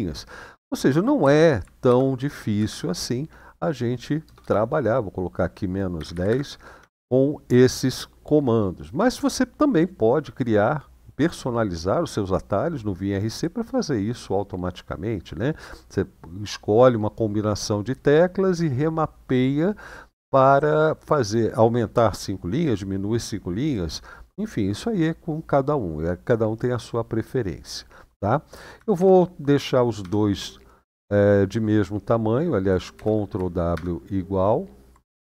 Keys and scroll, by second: 1.0 ctrl+w, 1.6 :, 2.3 Up, 4.0 BackSpace, 4.1 BackSpace, 5.7-6.7 typing, 6.5 Return, 28.7 ctrl+w, 32.7 ctrl+w.